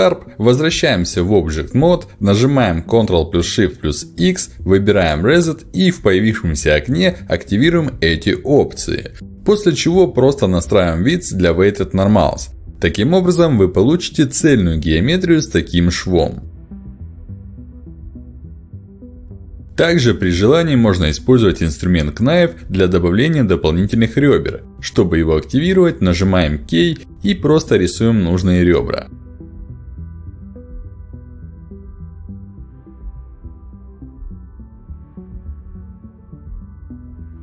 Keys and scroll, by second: 3.4 ctrl+alt+x, 3.4 Escape, 4.1 ctrl+shift+x, 26.3 k, 30.6 space, 32.4 k, 35.1 space.